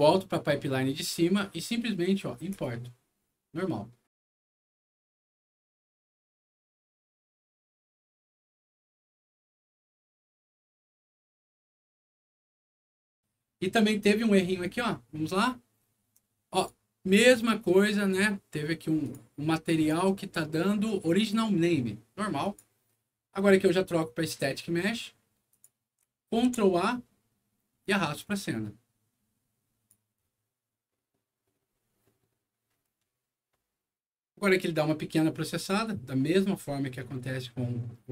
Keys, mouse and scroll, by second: 0.1 click, 2.5 click, 14.6 click, 16.5 click, 19.0 click, 19.7 click, 22.4 click, 24.2 click, 25.5 click, 26.3 ctrl+a, 27.8-29.9 ctrl+drag.